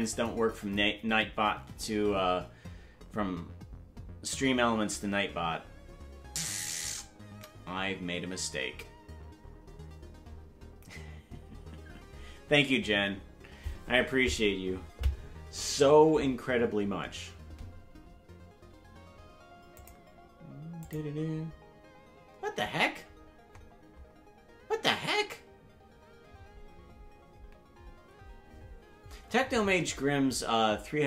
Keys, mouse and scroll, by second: 23.4 typing.